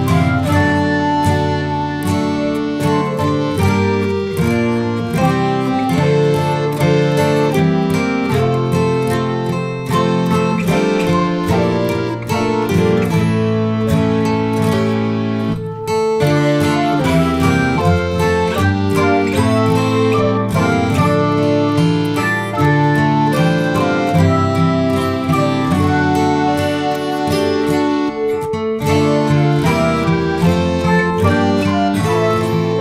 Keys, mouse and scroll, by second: 0.4 ctrl+s, 0.6 click, 0.7-1.1 middle drag, 1.1 ctrl+s, 1.4 click, 1.7-2.2 middle drag, 2.2 shift+click, 3.1-4.6 drag, 5.0 ctrl+s, 5.1 middle click, 5.2 scroll up 2, 5.4 click, 5.6 scroll down 3, 5.7 middle click, 5.8 scroll up 1, 5.9-6.4 middle drag, 6.4 shift+click, 6.6 middle click, 7.1-7.5 drag, 7.9 click, 9.2 click, 9.3 click, 10.9 scroll down 1, 11.0 middle click, 11.4 click, 12.1 shift+a, 14.2 g, 14.5 click, 15.3-21.5 drag, 21.5-22.2 scroll down 1, 22.2-23.9 drag, 23.9-24.4 scroll down 1, 24.4-26.2 drag, 26.2 ctrl+s, 26.6 click, 27.3 click, 29.1 ctrl+s, 31.2 click.